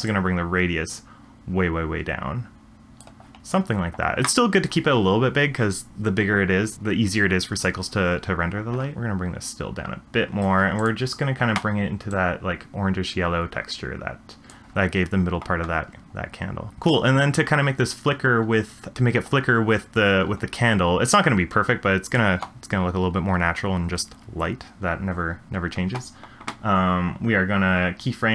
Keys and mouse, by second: 0.0-3.1 drag, 8.9 shift+middle click, 9.3-10.5 shift+drag, 10.7 click, 16.7 middle drag, 21.3 click.